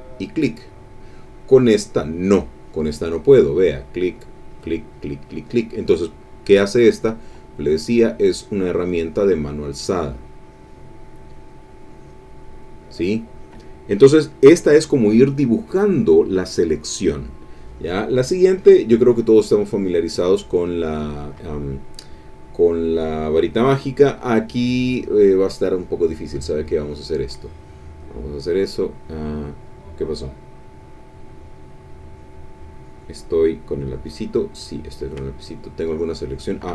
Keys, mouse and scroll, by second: 0.1 click, 1.9 click, 3.7 click, 4.4 click, 4.9 click, 5.2 click, 6.8 middle click, 8.0-12.2 drag, 18.6 click, 19.4-20.9 middle drag, 21.7 click, 22.4 click, 22.8 middle click, 23.0 click, 24.6 click, 26.4 click, 27.4 click, 34.0 click, 35.3-36.7 ctrl+drag.